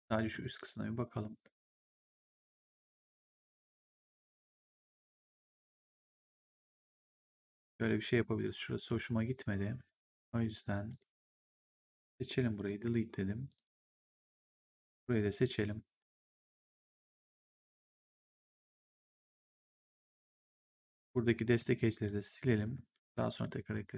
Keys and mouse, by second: 0.2 click, 1.3 1, 3.0 ctrl+1, 8.3 right click, 10.8 click, 11.4 shift+click, 12.6 Delete, 13.4 click, 13.8 Delete, 14.5 click, 15.1 click, 15.9 Delete, 17.3 click, 20.6 right click, 21.5 click, 22.3 click.